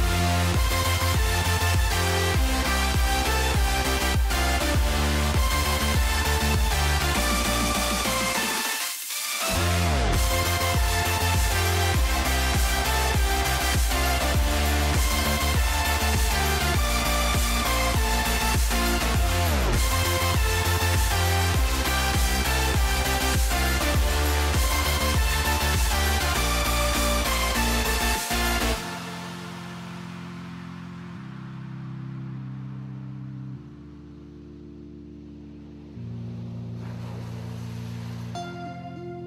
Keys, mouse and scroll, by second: 0.2-3.9 middle drag, 3.9-6.7 drag, 7.1 middle click, 8.2 middle click, 8.8 middle click, 9.2 click, 10.2 shift+a, 16.4 middle click, 16.9 middle click, 17.6 click, 20.3 click, 21.2 ctrl+t, 21.8 middle click, 22.4 click, 22.8 click, 23.4 click, 23.9 middle click, 24.3 middle click, 24.6 click, 25.3-26.7 drag, 27.1 click, 28.0 click, 29.2 middle click, 29.6 middle click, 30.4 click, 38.1 click, 38.3 Tab.